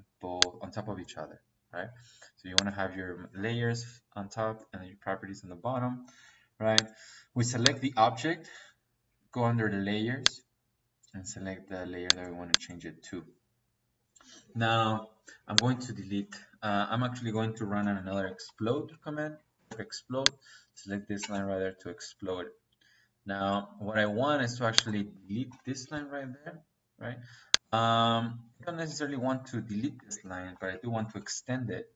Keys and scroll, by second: 16.8 Escape, 17.6-19.5 typing, 21.1 -, 21.7 Escape, 25.4 Delete, 27.9 Escape, 30.4 e, 30.7 x, 30.9 t, 31.2 e.